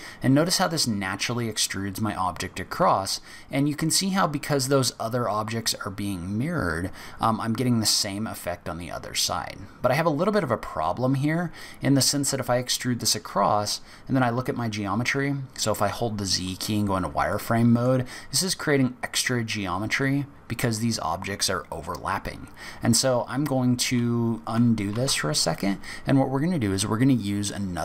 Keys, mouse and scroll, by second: 13.6-13.9 scroll up 4, 14.3 z, 17.2 middle click, 23.2 z, 24.9 z.